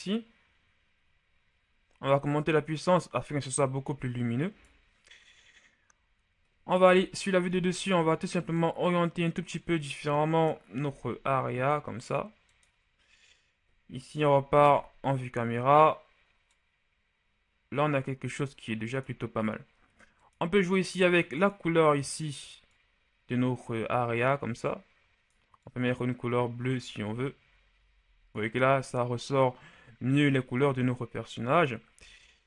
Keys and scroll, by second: 6.7 z, 10.8 r, 14.1 KP_0.